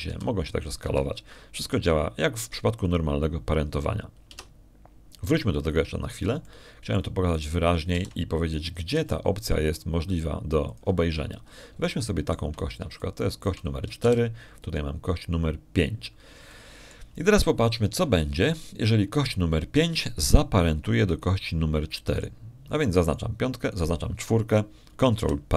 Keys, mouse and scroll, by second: 0.3 r, 1.5 Escape, 1.9 s, 2.7 Escape, 3.5 g, 4.6 click, 6.2 Tab, 8.0 shift+middle click, 8.0-8.3 scroll up 1, 8.3 shift+click, 9.2 shift+right click, 9.8 shift+d, 10.5 shift+click, 10.8 shift+r, 12.6 ctrl+click, 13.0 ctrl+middle click, 13.5 middle click, 13.7 shift+click, 14.5 shift+middle click, 14.8 shift+middle click, 15.9 shift+d, 17.6 click, 18.4 shift+click, 24.0 right click, 24.9 right click.